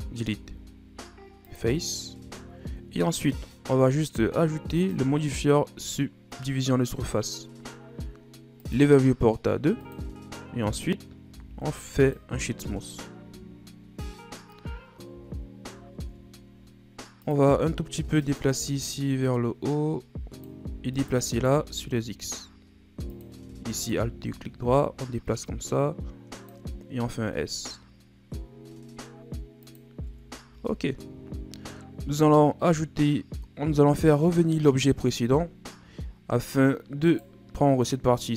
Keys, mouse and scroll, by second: 0.3 x, 2.2 Tab, 3.0-3.6 scroll down 2, 3.6-4.8 middle drag, 4.8-7.8 drag, 8.6-11.3 drag, 11.3 w, 13.3 KP_1, 15.1 Tab, 16.0 ctrl+Tab, 18.2 alt+right click, 19.0-20.9 drag, 20.9 alt+right click, 21.5 s, 23.7 alt+right click, 24.7-27.0 drag, 27.0 s, 30.5 a, 31.3-32.5 shift+scroll up 4, 32.5 scroll down 5, 34.7 click, 35.4 scroll down 5, 36.0 shift+scroll up 4, 37.0 right click.